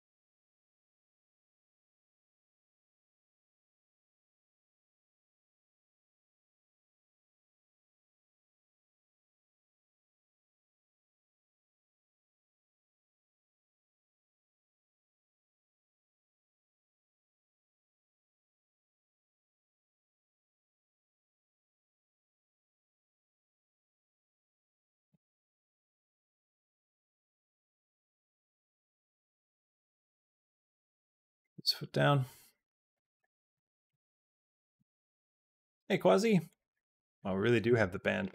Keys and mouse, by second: 8.1 middle click, 9.7-11.0 drag, 11.9 middle click, 12.5 shift+middle click, 12.9 middle click, 13.1 click, 14.4 g, 15.7 middle click, 16.7 click, 17.0 middle click, 17.6 g, 18.8 click, 19.3 g, 20.1 middle click, 21.1 click, 22.5-25.4 drag, 26.0 middle click, 26.6 g, 29.3 shift+middle click, 29.8 g, 30.6 middle click, 31.0 g, 33.0 middle click, 33.6 shift+middle click, 33.8 middle click, 34.6 g, 36.6 middle click, 37.4 g.